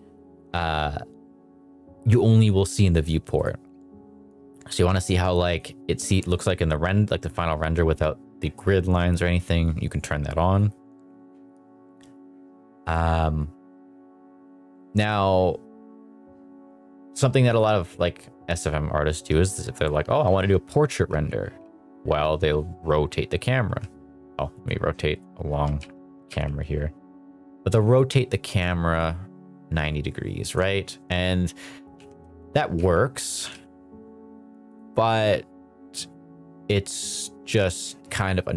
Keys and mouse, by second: 3.3 click, 5.4 click, 8.9 click, 10.5 click, 12.8 click, 17.4 click, 17.9 click, 19.0 r, 20.8 z, 21.2 z, 23.6 Escape, 24.5 click, 25.5 r, 25.8 z, 26.2 z, 30.4 click, 31.9-33.5 typing, 34.7 click.